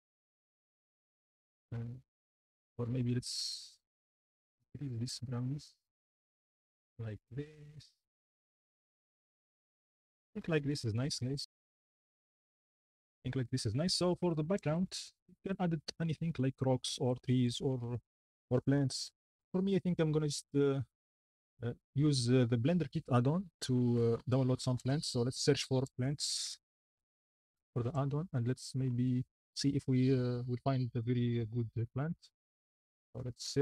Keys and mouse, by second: 0.6 shift+middle click, 3.5 shift+click, 4.2-5.8 shift+drag, 14.7 shift+middle drag, 15.5-16.0 shift+middle drag, 20.4-27.0 drag, 27.9 click.